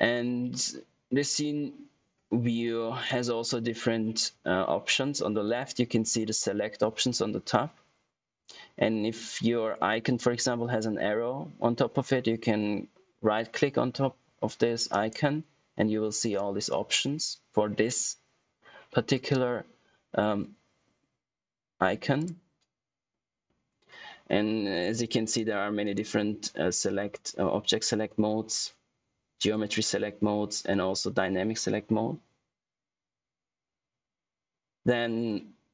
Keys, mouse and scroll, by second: 14.8 right click, 22.1 click, 25.2 right click.